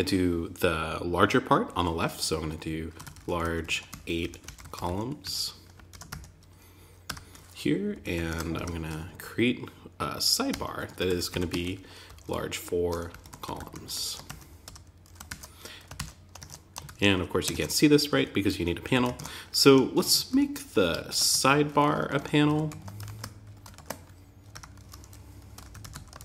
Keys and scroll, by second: 5.3 shift+., 5.4 Tab, 6.4 Return, 7.3 Down, 7.6 super+Right, 7.9 Return, 13.4 shift+>, 13.6 Tab, 14.0 Return, 14.6 super+s, 15.3 shift+super+t, 15.7 super+Tab, 16.2 super+r, 16.9 super+Tab, 18.3 Up, 18.5 super+Right, 19.0 Return, 20.7 Tab, 22.0 super+z, 23.9 Return, 25.7 Tab.